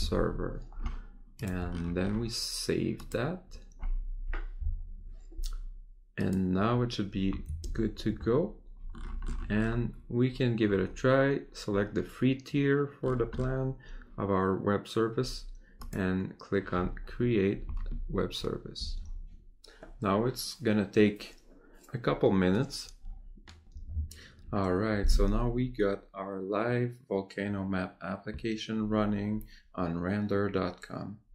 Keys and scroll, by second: 7.6 ctrl+Tab.